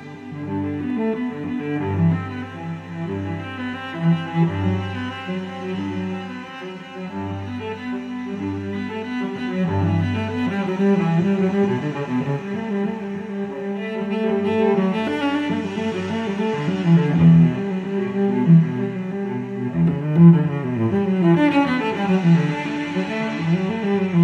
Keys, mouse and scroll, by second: 1.4 click, 4.4 click, 5.8 click, 7.7 click, 9.6 click, 11.4 click, 13.1 click, 14.0-14.4 scroll down 2, 14.9-15.2 scroll up 2, 16.4 click, 18.0 click, 22.2 click, 23.6 click.